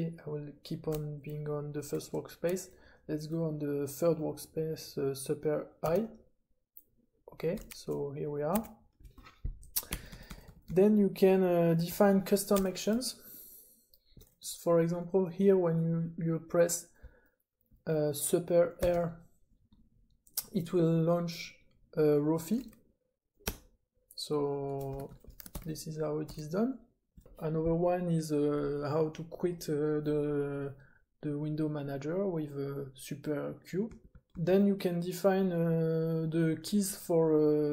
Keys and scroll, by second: 5.8 super+i, 8.7 super+a, 9.8-11.8 typing, 13.0 k, 13.6-14.1 k, 18.8 super+r, 23.4 Return, 25.0 super+space, 25.5 ctrl+d, 26.2 j, 26.9 j, 33.8 j, 34.1 j, 34.3 j.